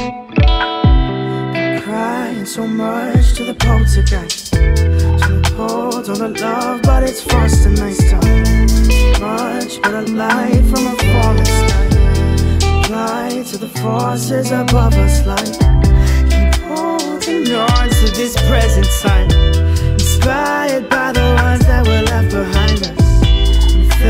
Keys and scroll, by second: 13.8 ctrl+v, 14.7 ctrl+a.